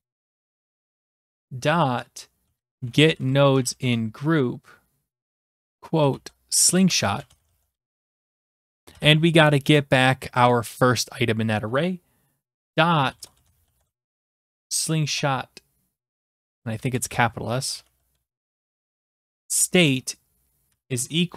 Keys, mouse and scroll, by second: 0.2 Down, 0.3 Down, 0.5 Down, 0.7 Return, 1.1 typing, 2.2-4.1 typing, 5.6-9.6 typing, 8.8 ctrl+z, 8.8 Right, 9.4 Left, 10.3 Right, 12.6-15.0 typing, 16.2-20.7 typing.